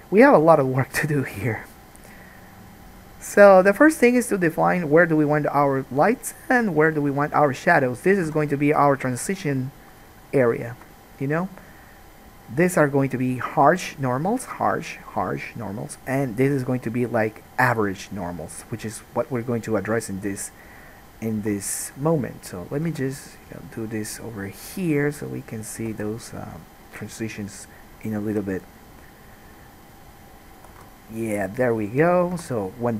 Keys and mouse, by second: 8.4 3, 8.6 click, 9.2-11.0 shift+middle drag, 11.0-22.0 drag, 21.6 1, 22.0 middle click, 22.1-32.9 drag, 22.9 g, 25.4 middle click, 25.4 right click, 26.0 g, 27.6 middle click, 27.6 right click, 28.4 g, 31.0 alt+a, 32.6 3.